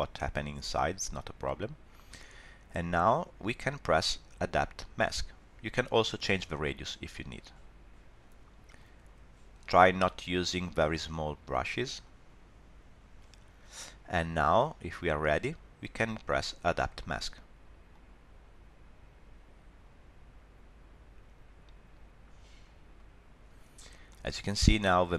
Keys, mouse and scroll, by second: 6.6 click, 8.8 click, 10.2 scroll up 2, 12.0 click, 14.6 scroll down 2, 14.9 middle click, 17.9 click, 24.1 middle click.